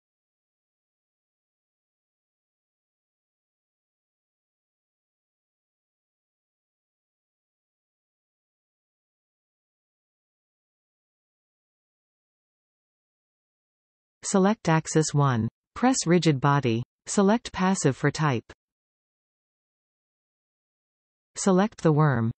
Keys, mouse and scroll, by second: 3.5-4.1 scroll down 1, 4.5-4.9 scroll up 1, 5.4 z, 8.1 scroll down 1, 8.9 scroll up 1, 9.8 click, 10.4 click, 11.1-12.1 scroll down 1, 12.1 z, 12.3 g, 14.0 click, 16.3 click, 17.1-21.4 drag.